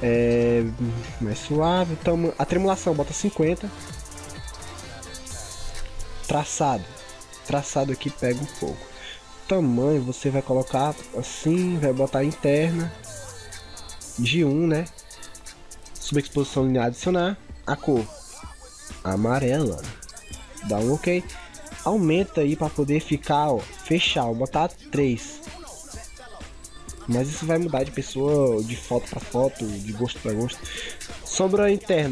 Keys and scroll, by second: 20.0 ctrl+v.